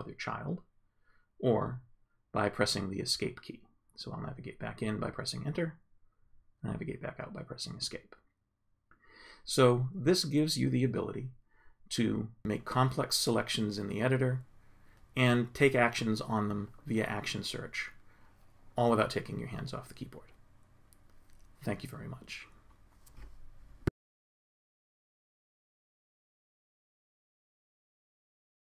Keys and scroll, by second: 5.0 Return, 6.2 Escape, 8.8 Return, 10.7 Right, 11.5 Up, 12.5 Right, 19.4 ctrl+Up, 22.6 ctrl+space.